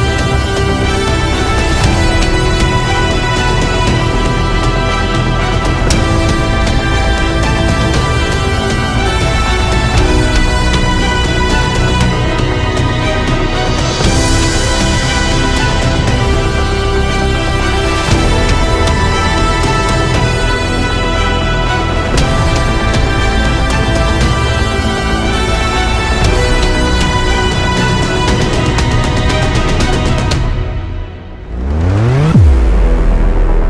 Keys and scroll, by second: 19.4 ctrl+alt+z.